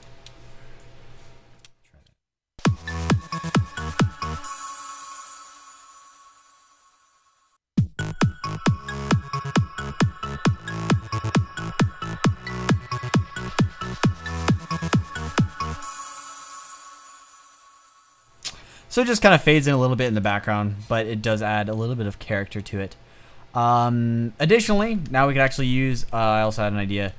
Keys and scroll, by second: 2.2 space, 21.5 space, 24.9-25.4 typing.